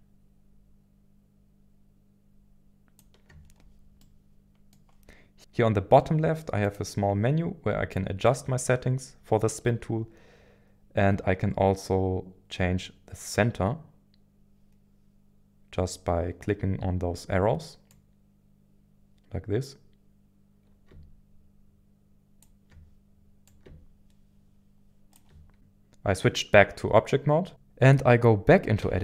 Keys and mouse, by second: 4.0 middle click, 6.6-7.7 drag, 7.9 shift+middle click, 17.9-22.4 drag, 23.4-25.3 drag, 28.8 Tab.